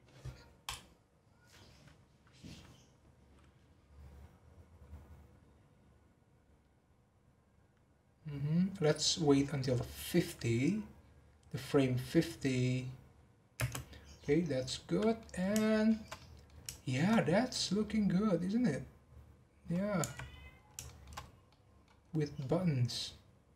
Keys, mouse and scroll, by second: 1.1 click, 13.8 space, 14.2-14.6 scroll up 6, 14.6-16.6 middle drag, 16.6 shift+scroll up 2, 17.1 scroll up 1, 17.5-20.3 middle drag, 20.3-20.8 scroll down 8, 20.8-21.2 shift+middle drag, 21.2 scroll up 1, 21.5-22.0 middle drag, 22.0-22.3 scroll up 3, 22.3-23.5 middle drag.